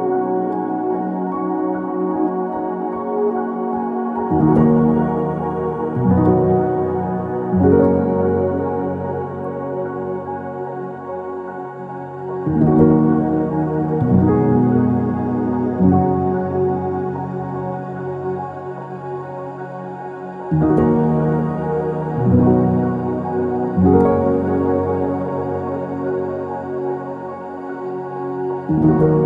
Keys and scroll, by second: 0.5 ctrl+v, 0.9-1.6 typing, 4.4 typing, 4.5 Return, 5.8 Escape, 6.8 Escape, 12.7 BackSpace, 14.2 ctrl+c, 17.7 BackSpace, 18.0 BackSpace, 23.0-23.8 typing, 25.0 ctrl+s, 27.5-29.2 typing, 27.6 Return.